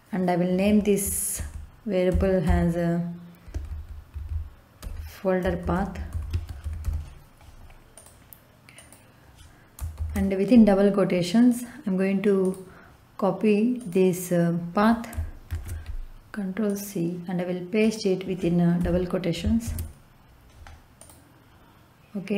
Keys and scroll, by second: 1.3-7.3 typing, 9.9 shift+', 15.4 ctrl+c, 18.7 Left, 19.6 ctrl+v.